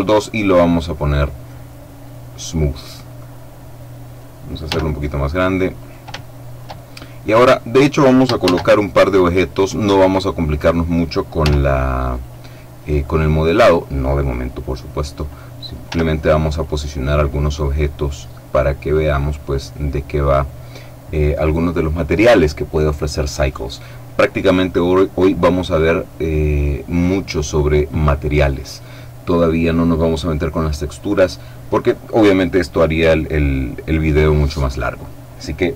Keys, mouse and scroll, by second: 1.1 click, 1.9-4.6 middle drag, 4.6 s, 5.7 shift+click, 6.1 shift+right click, 6.3 shift+middle click, 8.3 shift+a, 9.7 click, 11.3 s, 12.1-13.9 drag, 14.2-15.7 drag, 15.8 s, 16.4 click, 17.2-19.3 drag, 19.5-20.7 drag.